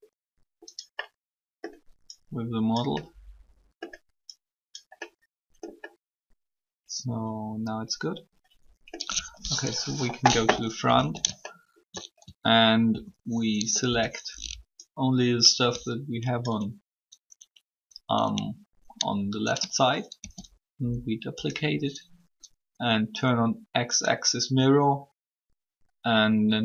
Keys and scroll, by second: 9.6 1, 12.2 alt+shift+a, 12.8 alt+a, 13.9 b, 20.0 shift+d.